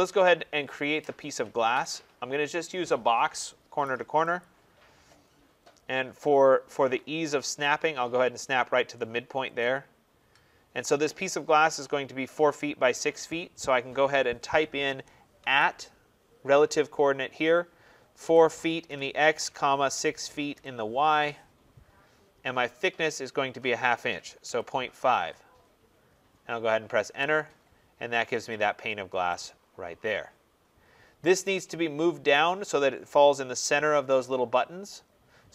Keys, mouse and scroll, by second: 4.3 click, 5.4-7.0 scroll, 7.0-9.3 scroll, 9.5 click, 11.2 scroll down 5, 15.3 shift+2, 18.1-20.4 typing, 20.9 Return, 22.2 scroll, 22.2 typing, 24.1-25.0 typing, 26.9 Return, 27.9 scroll, 28.6-29.2 scroll up 3, 29.3 click, 30.6-30.9 scroll down 5.